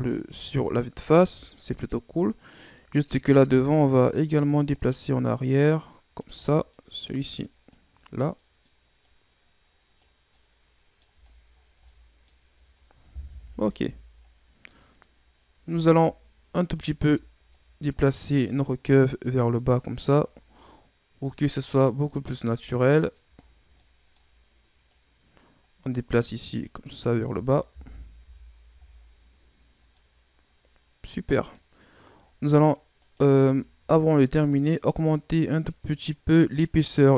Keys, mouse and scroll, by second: 0.1-0.7 scroll up 5, 0.7-2.3 middle drag, 2.3 right click, 2.7-3.3 middle drag, 3.3 Tab, 3.6 middle click, 4.5 right click, 6.3 middle click, 7.0 right click, 8.2 middle click, 8.9 right click, 10.2-11.2 middle drag, 11.2-11.8 scroll down 9, 11.8-13.2 middle drag, 13.2 KP_1, 13.6 Tab, 14.1-15.1 scroll down 5, 15.1-15.8 scroll up 5, 15.8-16.6 scroll down 1, 16.6 right click, 16.9 Tab, 17.4 right click, 19.7 right click, 22.5 scroll down 3, 22.6 middle click, 23.3-23.6 scroll down 2, 23.6-24.8 middle drag, 24.8 right click, 26.4 right click, 27.7 KP_1, 28.1 Tab, 28.6 a, 28.8-29.8 scroll down 1, 29.8-32.0 middle drag, 32.0-32.9 scroll up 8, 32.9 right click, 33.4-34.3 scroll up 4, 34.3-34.9 scroll up 1, 34.9 drag, 36.0-37.1 scroll down 5.